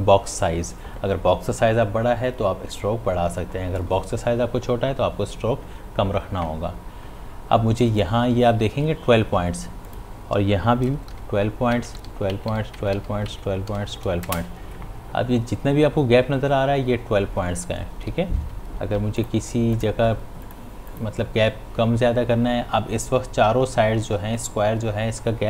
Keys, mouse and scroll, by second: 9.9 click, 11.7 Tab, 18.3-19.0 typing, 19.2 click.